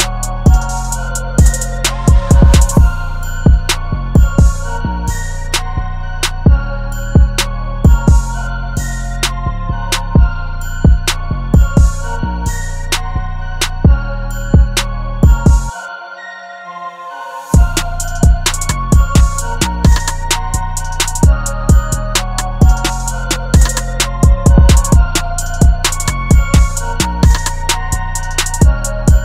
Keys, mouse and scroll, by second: 18.7 alt+click, 26.2 right click, 28.6 typing.